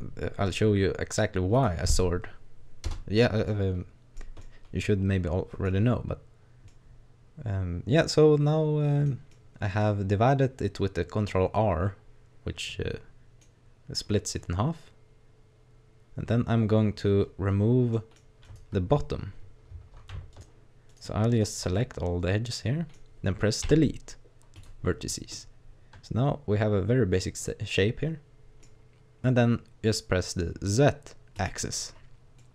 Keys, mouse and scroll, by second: 3.5 middle click, 4.4 middle click, 6.7 middle click, 9.3 middle click, 14.4 middle click, 17.9 middle click, 18.4 right click, 20.3 shift+right click, 20.9 shift+right click, 21.3 right click, 21.8 middle click, 23.7 Delete, 25.4 middle click, 31.4 click, 32.4 middle click.